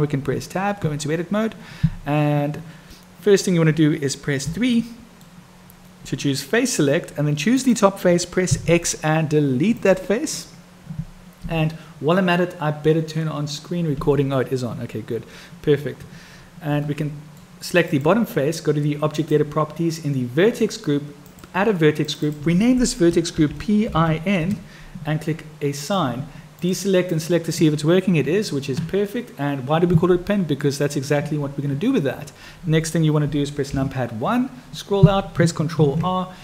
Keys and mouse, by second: 0.2 Tab, 4.7 click, 4.7 3, 7.6 click, 14.0 n, 16.8 click, 19.2 click, 21.2 click, 22.0 click, 22.3-25.1 drag, 26.5 click, 27.2-30.6 drag, 30.6 middle click, 33.6 KP_1, 35.9 ctrl+r.